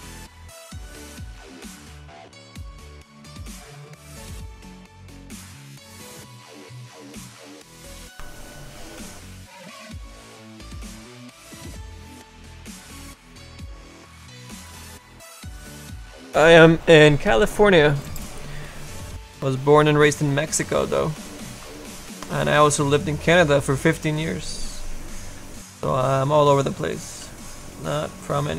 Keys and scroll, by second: 0.2 s, 27.3 s.